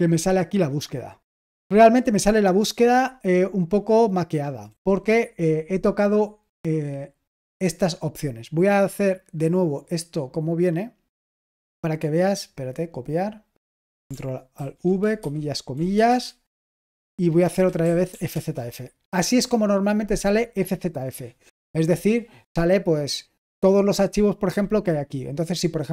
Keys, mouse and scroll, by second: 4.6 Escape, 6.2-8.5 scroll down 1, 8.6-11.2 drag, 11.0 right click, 12.3 click, 13.1-14.5 drag, 14.5 ctrl+alt+v, 15.1-18.5 typing.